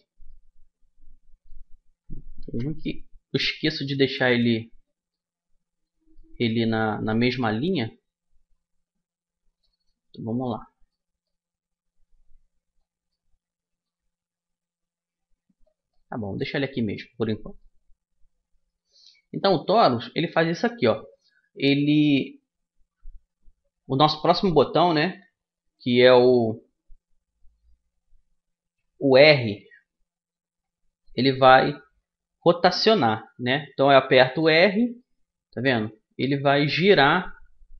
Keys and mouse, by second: 1.6 middle click, 2.2 KP_1, 8.2 middle click, 9.8 click, 10.2 middle click, 10.7-11.7 middle drag, 11.7-12.8 drag, 12.8-22.3 middle drag, 34.1 r.